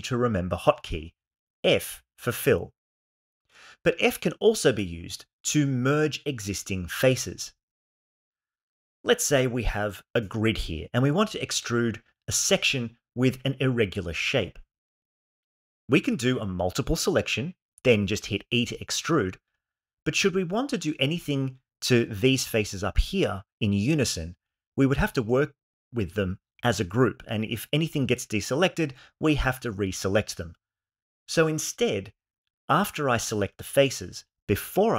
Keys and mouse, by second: 3.6 Tab, 4.3 x, 4.9 shift+a, 7.1 Tab, 8.4 3, 10.0 click, 10.5 shift+click, 11.0 shift+click, 11.3 shift+click, 11.9 shift+click, 12.2 shift+click, 13.1 shift+click, 14.1 shift+click, 15.2 shift+click, 15.6 shift+click, 15.9 shift+click, 16.4 shift+click, 17.4 e, 20.4 click, 31.3 ctrl+z.